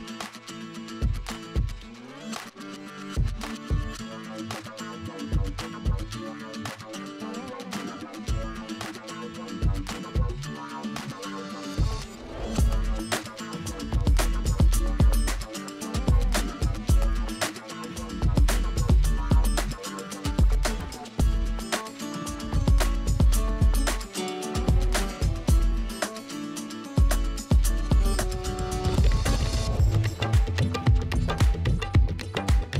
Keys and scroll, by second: 0.0-0.5 typing, 1.0 ctrl+space, 2.6 space, 2.9 ], 4.8 space, 5.1 space, 11.5 space, 12.0 [, 14.3 space, 14.4 v, 15.6 o, 16.3 ], 21.7 ].